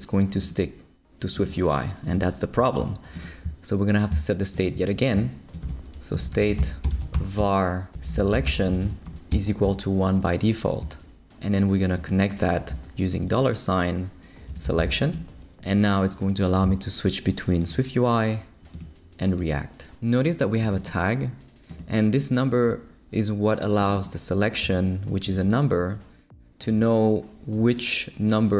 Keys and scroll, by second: 5.1 Return, 5.6-9.6 typing, 13.1 shift+4, 14.2-15.3 typing.